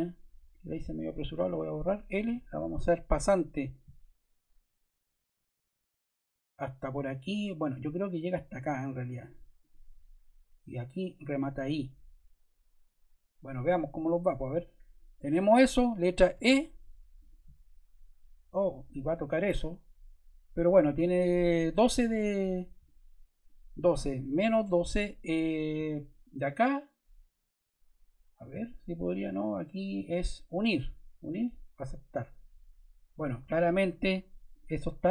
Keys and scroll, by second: 1.3 BackSpace, 2.1 l, 13.8 Escape, 16.3 e, 24.1-25.3 typing.